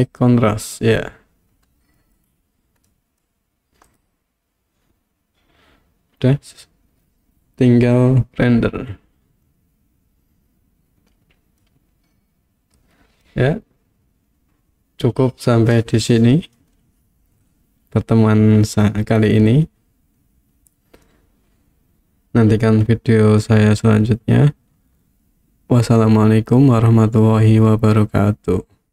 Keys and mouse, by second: 2.2 middle click, 3.0 middle click, 3.9 click, 11.6-13.3 middle drag.